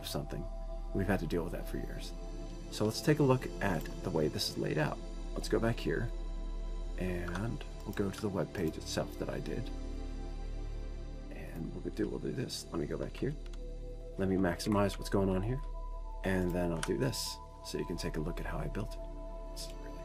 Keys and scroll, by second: 19.0 F12, 19.0 super+Up, 19.0 ctrl+0.